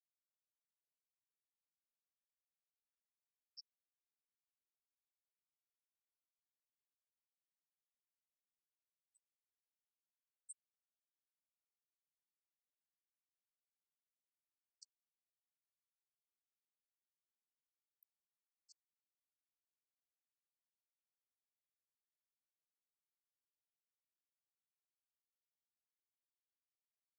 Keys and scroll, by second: 19.7 ctrl+v.